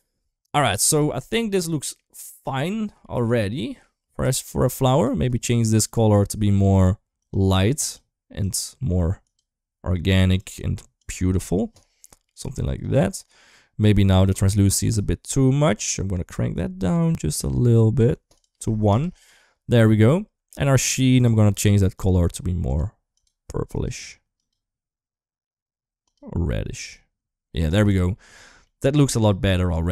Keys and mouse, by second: 0.2 ctrl+s, 0.7 click, 1.0-1.7 middle drag, 2.8 middle click, 5.0 middle click, 5.6 click, 12.0 middle drag, 13.2 middle click, 13.9 middle click, 14.8-17.8 shift+drag, 18.1 click, 19.0-19.5 middle drag, 20.3 middle click, 27.7 ctrl+s, 28.4 middle click, 29.7 middle click.